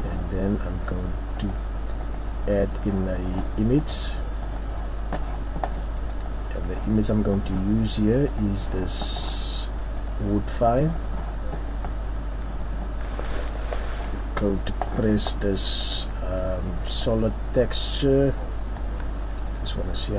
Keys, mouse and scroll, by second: 11.0 click, 17.4 click, 17.8-18.3 scroll up 1, 18.8 scroll up 1, 18.9 Tab, 19.3 middle click, 19.9-20.1 scroll down 10.